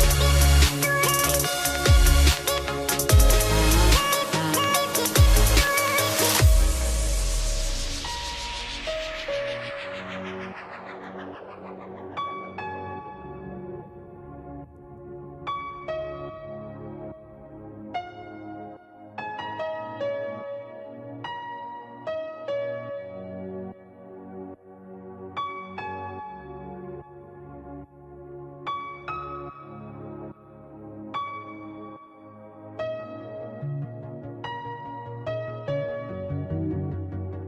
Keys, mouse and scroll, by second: 0.3 click, 1.3 click, 2.1 click, 2.7 click, 5.1 click, 6.8 click, 8.4 ctrl+x, 8.7 click, 9.8 ctrl+f, 13.8 click, 14.9 click, 15.9 ctrl+click, 16.3 click, 20.7 click, 21.5 click, 22.8 shift+click, 23.5 click, 24.3 click, 25.0 click, 26.0 click, 28.7 right click, 30.2 click, 32.6 click, 33.5 scroll, 34.4 click.